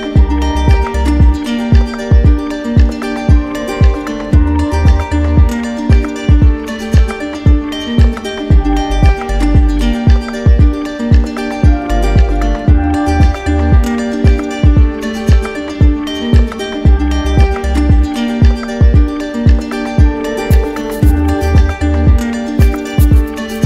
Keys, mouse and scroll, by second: 0.4 Return, 12.4 click, 22.3-23.3 drag.